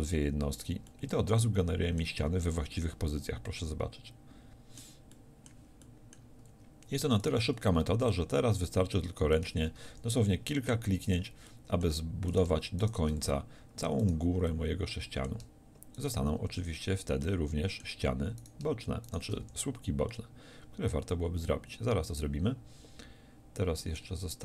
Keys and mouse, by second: 0.0-2.8 middle drag, 2.4 z, 7.3-9.4 drag, 10.0 f, 13.2 f, 16.6 f, 17.3-19.5 drag, 19.5 f, 20.2-22.7 drag, 22.7-24.4 middle drag.